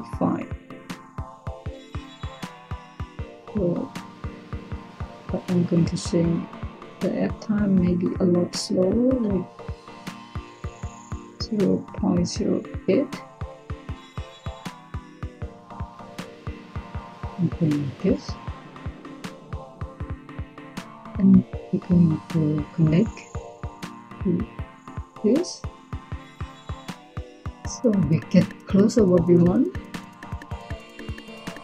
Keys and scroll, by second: 12.0-12.6 typing.